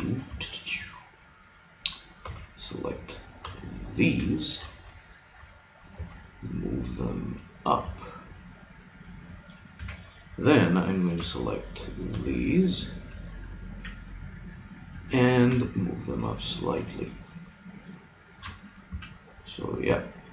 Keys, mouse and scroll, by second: 2.3 b, 3.5 b, 4.4-6.2 drag, 5.9 g, 9.7 a, 11.3 b, 12.1 b, 13.3-15.0 drag, 15.5 g, 18.2-19.6 drag, 18.9 a.